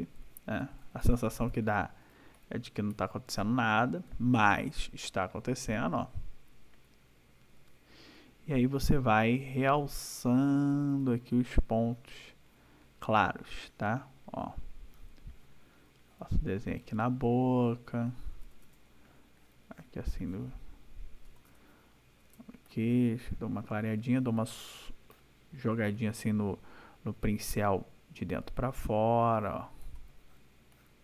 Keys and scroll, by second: 8.1 ], 13.3 ], 16.9 \, 21.3 \, 29.3 \.